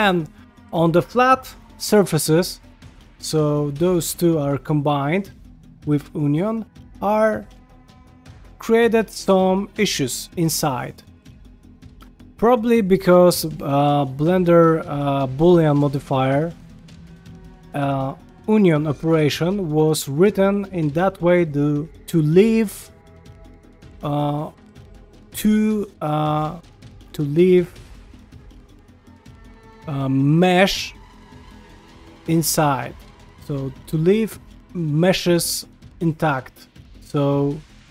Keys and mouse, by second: 0.1 ctrl+middle click, 2.5-2.9 ctrl+shift+middle drag, 3.1-3.4 shift+middle drag, 3.6 middle click, 4.7-5.2 middle drag, 5.4 shift+middle drag, 6.4 middle click, 6.9 ctrl+middle click, 7.8-8.8 shift+middle drag, 10.7 shift+middle drag, 11.0 ctrl+middle click, 11.3 middle click, 19.5 ctrl+middle click, 20.5 middle click, 21.1 shift+middle click, 21.4 ctrl+middle click, 33.8 ctrl+middle click, 36.3 middle click, 37.4 middle click.